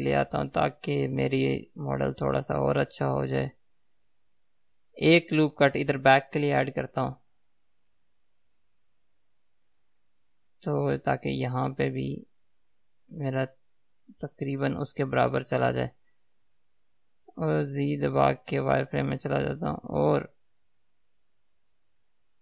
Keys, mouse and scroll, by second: 8.9 ctrl+r, 14.8 click, 19.1 z, 21.1-21.8 scroll down 2, 21.8-22.4 middle drag.